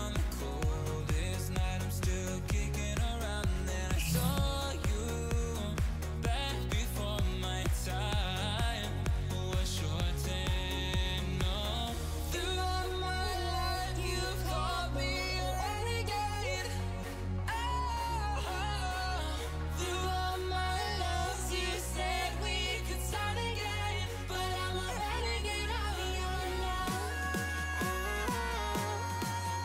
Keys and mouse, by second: 1.3 click, 4.2 space, 4.8 click, 5.2 click, 5.7 x, 5.8 click, 6.1 click, 6.3 click, 7.0 click, 7.8 click, 8.0 x, 8.1 click, 8.9 x, 9.3 x, 9.4 click, 11.4 space, 11.6 x, 11.7 click, 12.0 click, 12.2 click, 12.3 x, 12.4 click, 12.7 click, 14.0 space, 15.8 click, 16.5 x, 16.8 x, 16.9 click, 17.3 click, 17.7 x, 17.8 click, 18.5 click, 19.8 click, 20.6 click, 22.3 click, 24.0 click, 24.3 click, 24.8 click, 25.4 click, 25.8 click, 26.3 click, 28.0 click.